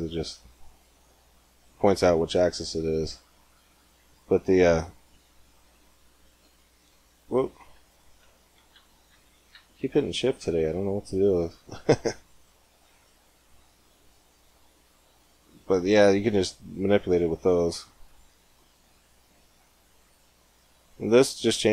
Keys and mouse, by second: 5.7 shift+z, 6.1 shift+z, 7.5 shift+z, 8.1 ctrl+z, 8.5 ctrl+z, 8.6 ctrl+z, 8.9 ctrl+z, 9.4 ctrl+z, 9.8 ctrl+z, 12.8-14.7 drag, 16.1-19.6 drag.